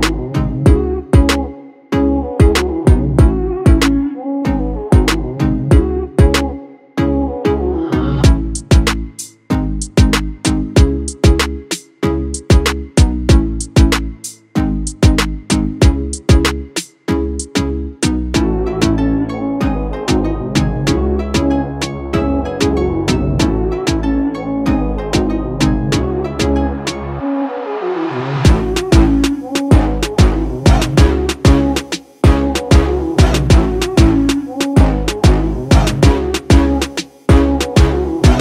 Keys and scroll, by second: 0.0-0.4 typing, 5.0 3, 5.5 Return.